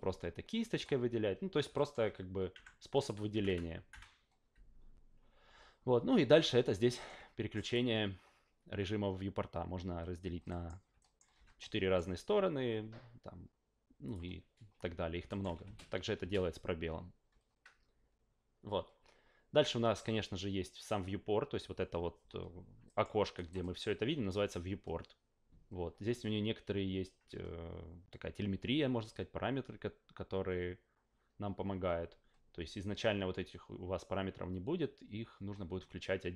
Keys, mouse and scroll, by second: 1.7 alt+middle click, 2.5 q, 3.3 F8, 3.4 F8, 3.9 F8, 6.9 alt+middle click, 7.6 click, 10.5 alt+middle click, 11.0 alt+middle click, 11.6 alt+middle click, 14.0 click, 15.3 alt+middle click, 15.6 space, 16.2 space, 22.8 alt+middle click, 23.3 alt+right click, 23.6 alt+middle click.